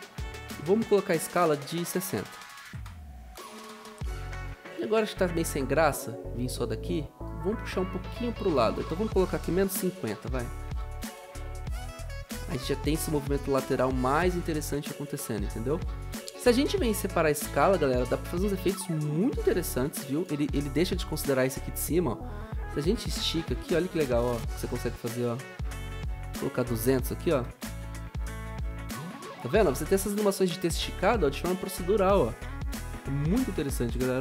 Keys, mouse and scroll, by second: 2.1-2.8 typing, 3.8 click, 10.0 ctrl+a, 10.4-11.7 typing, 23.4 ctrl+z, 26.6-28.1 typing, 33.7-34.2 typing.